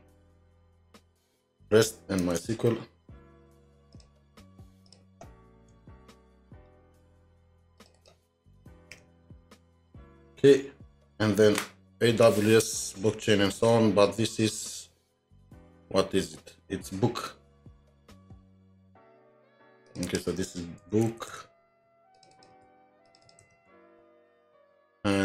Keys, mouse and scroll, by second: 2.2 alt+Tab, 4.9 shift+click, 5.7-6.4 typing, 6.6 scroll, 6.6-7.1 scroll down 1, 7.1 scroll, 7.9 double click, 9.0-10.1 typing, 13.6 alt+Tab, 14.7-16.6 scroll up 3, 16.6-17.1 scroll up 6, 17.1-18.4 scroll down 10, 18.4 scroll up 1, 20.1 double click, 20.9-22.7 typing, 22.3 double click, 23.2 double click, 23.7 ctrl+d, 24.6 typing, 24.7 alt+Tab.